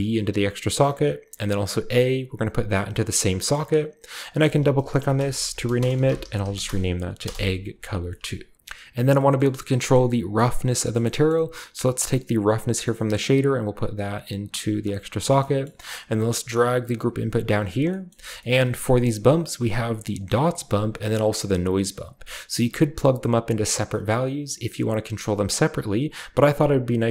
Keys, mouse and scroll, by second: 1.9-3.1 drag, 3.3 click, 4.1 click, 4.2 click, 5.0-8.5 typing, 7.9-8.5 scroll down 1, 8.2-8.5 middle drag, 8.5 ctrl+z, 8.5-9.0 scroll up 1, 9.0-10.2 scroll down 1, 9.3-10.7 middle drag, 10.2-11.3 scroll down 1, 10.9 middle click, 11.3-13.1 middle drag, 11.3-13.1 scroll up 1, 13.1-14.8 drag, 13.1-14.8 scroll up 1, 15.2 click, 15.4 click, 16.1 g, 17.6 click, 18.1-19.4 scroll up 1, 20.5 click, 21.1-22.2 drag.